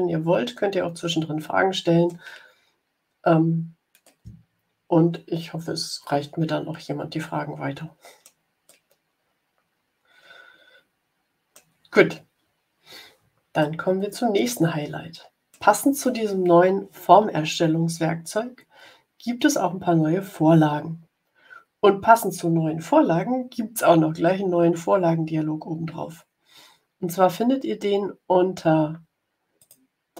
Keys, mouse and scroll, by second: 3.9-8.3 middle drag, 8.6-11.6 drag, 13.5-15.6 middle drag, 29.5 click.